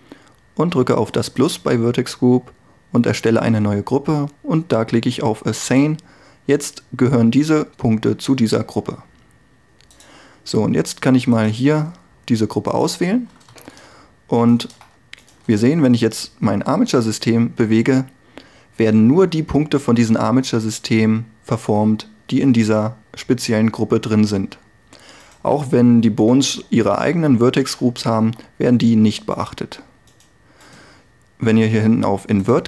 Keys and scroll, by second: 13.7 Tab, 16.6 g, 28.3 r.